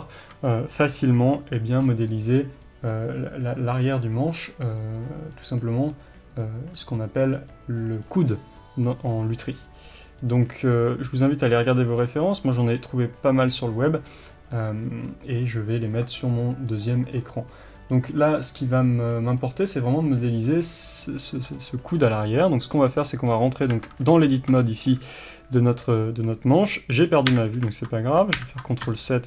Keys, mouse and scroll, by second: 1.8-5.3 scroll up 1, 11.0 middle click, 12.8-22.5 middle drag, 12.8 scroll up 1, 22.5 click, 22.7 scroll up 1, 23.3 click, 23.7 Tab, 24.3 scroll up 1, 24.4 scroll down 1, 24.6-29.2 shift+middle drag, 27.2 KP_7, 28.3 ctrl+KP_7, 28.8 KP_6.